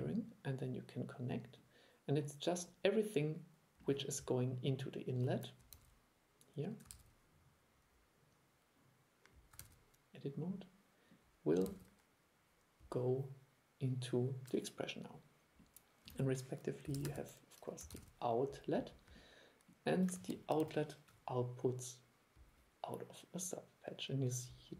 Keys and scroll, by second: 5.8 super+e, 7.0 super+e, 9.7 super+e, 11.8 super+e, 16.2 super+1.